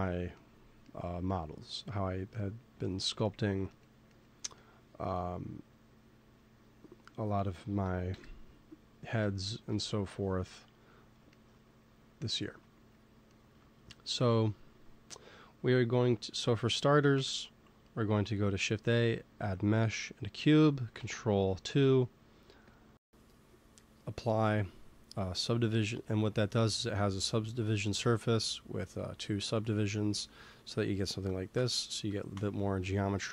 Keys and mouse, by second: 6.3-8.0 drag, 8.0 KP_1, 9.6 shift+s, 11.4-12.8 middle drag, 17.0 shift+a, 20.9 ctrl+2, 22.6-25.6 drag, 29.4 middle click, 31.4 Tab, 32.2 Tab.